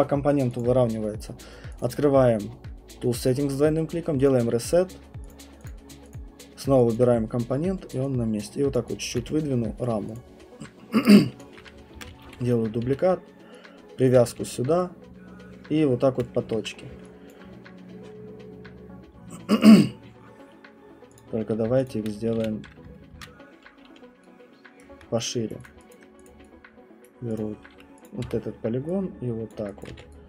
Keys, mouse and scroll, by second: 0.6 alt+click, 1.8 click, 1.9 click, 4.0 alt+click, 4.2 click, 5.3 click, 5.7 click, 6.4 click, 6.9 alt+click, 7.0 alt+click, 8.8 click, 9.1 alt+click, 9.2 q, 9.8 right click, 10.1 click, 10.7 middle click, 11.4 alt+click, 11.9 ctrl+d, 12.2-16.4 typing, 14.1 click, 16.2 click, 16.8 middle click, 16.9 middle click, 17.3 alt+click, 21.2 click, 21.2 v, 21.9 shift+click, 22.4 r, 23.1 ctrl+c, 24.8 right click, 25.5 right click, 25.6 click, 26.3 click, 27.0 right click, 27.4 click, 28.0 click, 28.2 alt+click, 28.2 w, 29.5 click, 29.9 alt+click, 29.9 q.